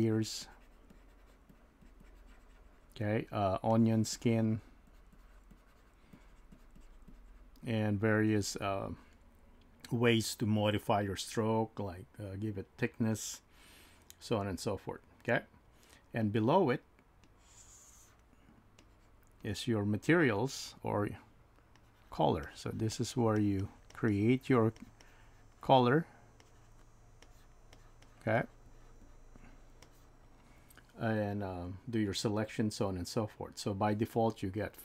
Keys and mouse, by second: 0.4 click, 1.5-3.7 drag, 4.1 click, 5.1-11.2 drag, 17.2 click, 18.8-20.9 drag, 21.8 click, 22.9 click, 23.9 click, 24.1 click, 25.0 click, 26.4 click, 28.7 click, 29.0 click, 29.8 click.